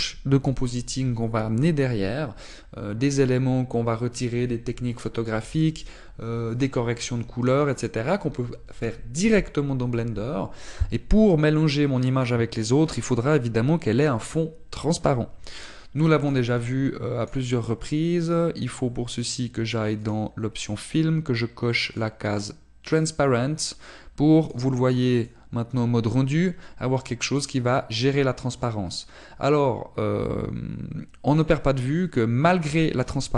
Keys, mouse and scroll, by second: 23.0 click, 23.0-24.6 scroll down 4, 24.8 click, 25.6 click, 33.2 click.